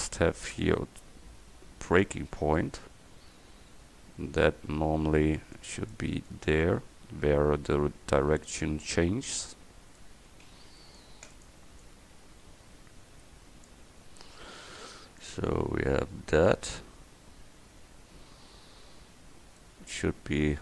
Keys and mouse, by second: 5.6-10.1 drag, 10.4 a, 10.6 c, 11.9-13.7 drag, 14.1 Tab.